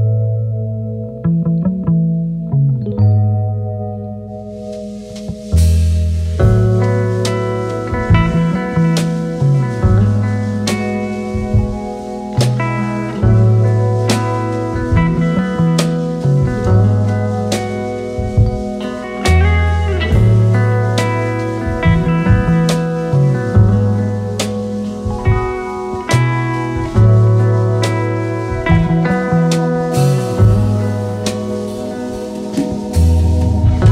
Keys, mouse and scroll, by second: 0.1 ctrl+m, 9.0 BackSpace, 18.0 Right, 18.2-20.2 typing.